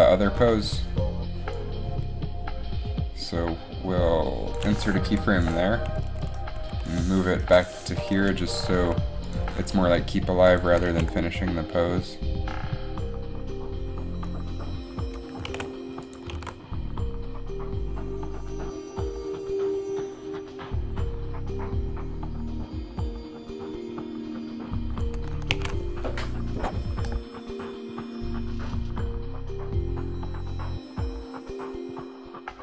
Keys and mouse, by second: 0.2 alt+a, 1.7 click, 5.2 i, 6.8 g, 7.5 Delete, 8.3 g, 11.0 alt+a, 12.5 alt+a, 15.6 alt+a, 16.4 alt+a, 16.5 alt+a, 19.5 alt+a, 25.7 alt+a.